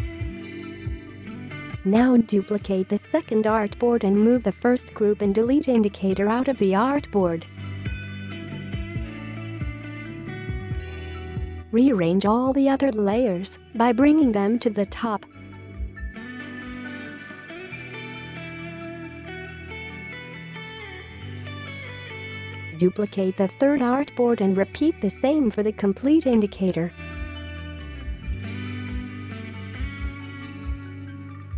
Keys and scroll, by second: 3.9 space, 14.8 space, 15.3 space, 15.4 space, 20.0 space, 20.6 space, 22.7 ctrl+z, 23.8-24.3 space, 27.0-27.8 typing, 29.2-29.9 space.